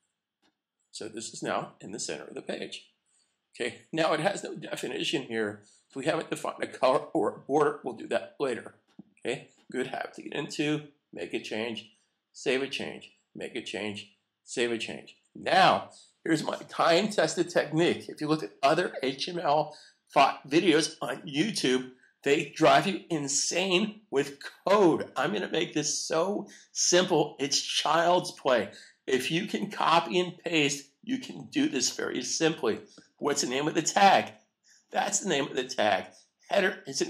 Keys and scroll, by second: 12.3 super+s.